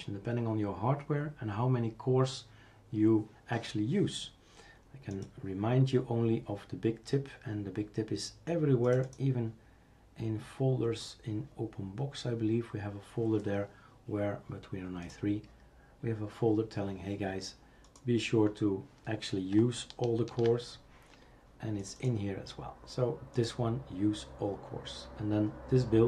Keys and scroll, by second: 20.3 ctrl+h.